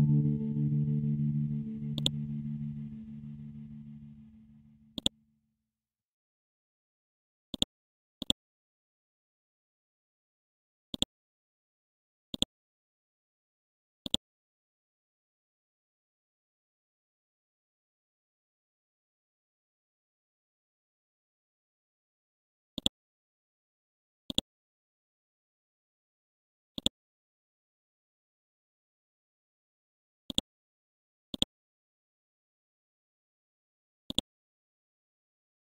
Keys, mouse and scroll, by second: 0.2-0.6 scroll up 1, 1.9 shift+click, 2.9-4.6 scroll down 1, 4.6 c, 5.0 click, 5.3 scroll down 1, 6.0 scroll up 1, 7.5 click, 8.2 right click, 10.9 click, 12.7-13.4 scroll down 1, 13.4-13.8 scroll up 1, 14.0 click, 16.6 scroll down 1, 17.3-20.4 scroll up 1, 22.7 click, 24.3 ctrl+click, 26.7 click, 30.3-33.5 drag.